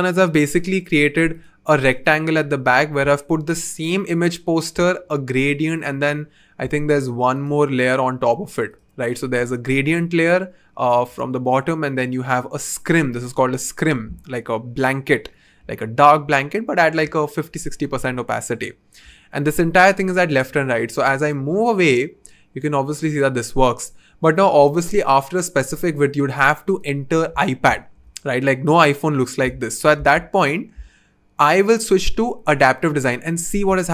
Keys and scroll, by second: 20.9 v, 29.9 super+z.